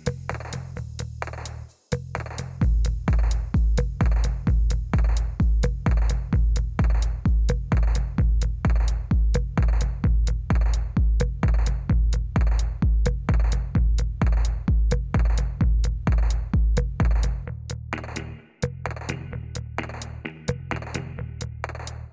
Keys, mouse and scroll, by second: 0.1 right click, 0.8 click, 1.1 right click, 1.7 click, 2.1 right click, 2.9 click, 3.4 click, 5.4 click, 11.6 right click, 12.2 click, 12.9 click, 16.2 click, 17.9 click, 19.0 click, 19.2 click, 20.0 click, 21.6 click.